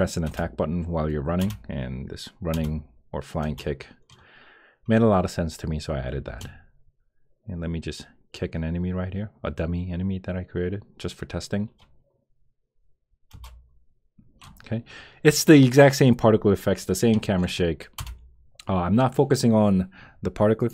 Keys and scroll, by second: 0.3 Return, 1.4 Return, 2.5 Return, 3.4 Return, 13.3 Return, 17.9 Return.